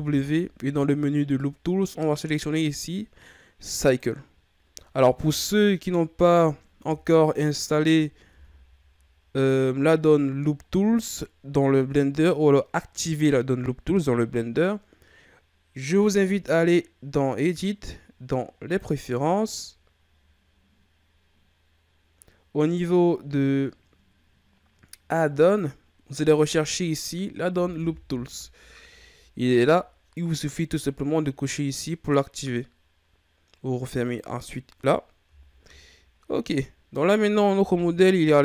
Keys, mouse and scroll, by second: 5.2 KP_1, 7.7-8.3 ctrl+scroll down 2, 8.3 Tab, 17.4-21.7 drag, 35.3-36.4 shift+scroll down 5, 36.4-36.9 scroll up 2, 36.9 right click, 37.7 KP_3.